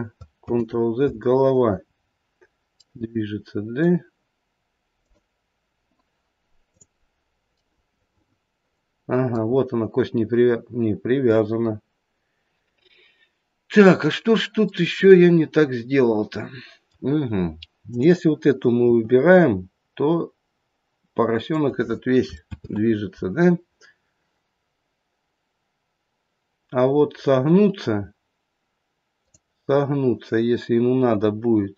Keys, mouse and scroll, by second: 0.4 ctrl+z, 2.8 middle click, 4.9 click, 6.6 click, 7.8 middle click, 7.9 middle click, 9.4-10.6 scroll up 2, 14.1-15.1 scroll down 2, 15.1 middle click, 16.5 middle click, 17.8 click, 18.8 r, 22.5 ctrl+z, 29.2 click.